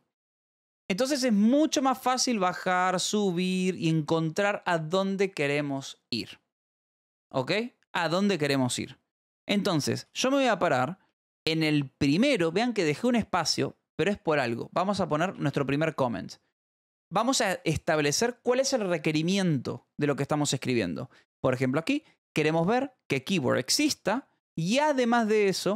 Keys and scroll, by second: 1.1 ], 2.0 [, 2.6 ], 3.2 [, 10.4 a, 11.0 space, 15.2 /, 15.5 space.